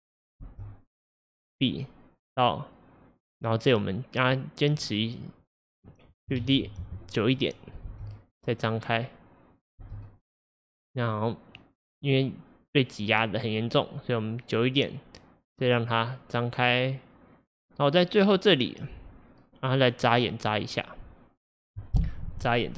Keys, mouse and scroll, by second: 0.5 space, 1.0-4.1 drag, 5.2-6.4 drag, 6.4 shift+d, 7.9 space, 9.9 space, 10.2-13.3 drag, 22.5 click.